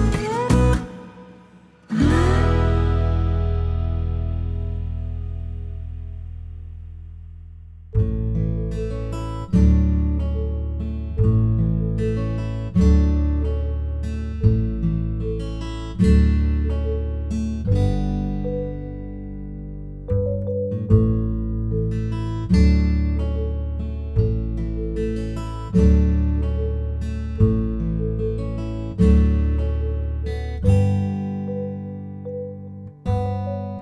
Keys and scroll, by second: 4.3 g, 5.1 g, 9.1 ctrl+z, 9.6 typing, 11.2 ctrl+z, 13.7 typing, 16.4-19.4 typing, 32.9 space.